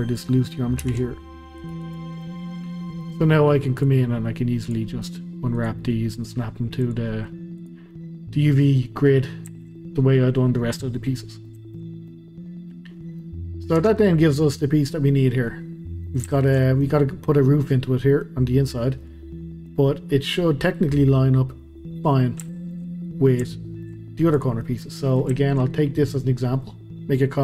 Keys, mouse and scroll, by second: 0.8 ctrl+r, 2.2-3.7 middle drag, 3.7 click, 4.9 middle click, 5.0-5.5 scroll down 2, 5.5 click, 5.9 middle click, 6.8 click, 7.1 middle click, 7.6 click, 7.9-9.2 middle drag, 9.2 scroll down 1, 9.5-12.3 middle drag, 12.3-12.7 scroll up 1, 12.7-13.2 scroll down 1, 13.2-13.8 middle drag, 13.8 Tab, 14.0-15.7 middle drag, 15.7-16.0 scroll up 1, 16.0-19.9 shift+middle drag, 19.9 scroll down 1, 20.1-20.8 middle drag, 20.8 scroll down 1, 21.0-22.1 scroll up 1, 22.1-22.5 scroll down 1, 22.5-22.9 shift+scroll, 22.9 shift+middle click, 23.0-23.5 scroll down 1, 23.5 shift+middle click, 24.3 drag, 24.6-27.4 middle drag.